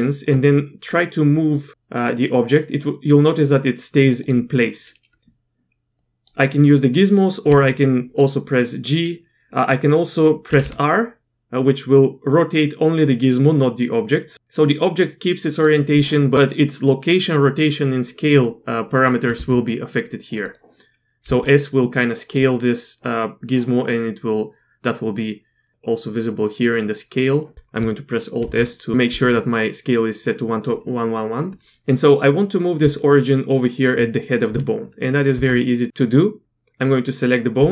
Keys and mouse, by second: 1.4-4.2 drag, 5.9 click, 7.5 g, 10.5 r, 19.3 s, 21.2 s, 28.4 alt+s, 32.8 d, 33.0-34.4 drag, 35.3 Tab, 35.3 d, 37.6 Tab.